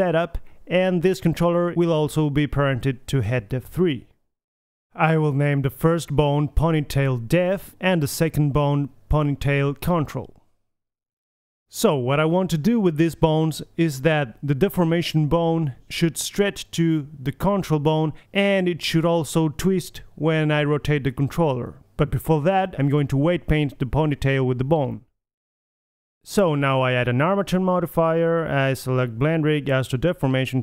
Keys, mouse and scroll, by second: 1.6 Tab, 3.3-5.1 middle drag, 5.1-6.5 drag, 6.6 middle click, 7.8 ctrl+c, 8.3 click, 8.9 middle click, 9.5 BackSpace, 9.5 BackSpace, 12.1 KP_3, 12.8-13.1 middle drag, 14.3-15.1 middle drag, 15.5-16.5 middle drag, 16.8-18.8 drag, 17.8 g, 19.4-19.9 middle drag, 22.6-24.8 middle drag, 26.1-27.5 drag, 28.0-30.1 drag, 30.2 middle click, 30.3-30.6 drag.